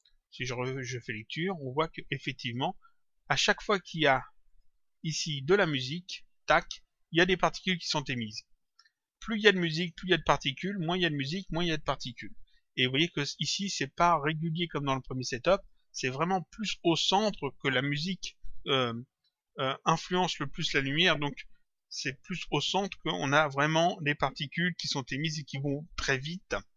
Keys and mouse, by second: 0.5 click, 4.4 click, 14.5 click.